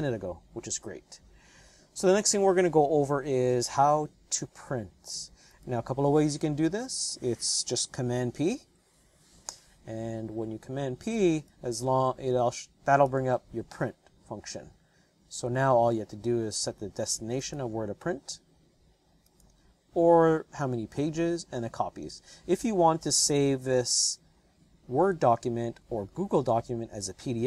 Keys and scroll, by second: 6.5 Return, 8.6 super+p.